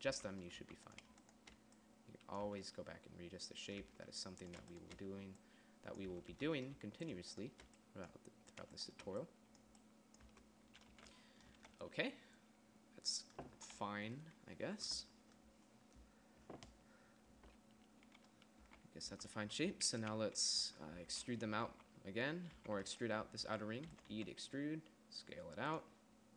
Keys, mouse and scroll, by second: 0.5 Tab, 1.0 a, 2.9 Tab, 4.2 Tab, 6.6 Tab, 6.8 Tab, 10.7 Tab, 11.3 a, 12.0 a, 19.0 a, 19.5 a, 19.9 Tab, 20.5 KP_1, 21.0 Tab, 21.4 Tab, 22.0 a, 22.2 a, 22.9 a, 24.4 e, 24.6 s.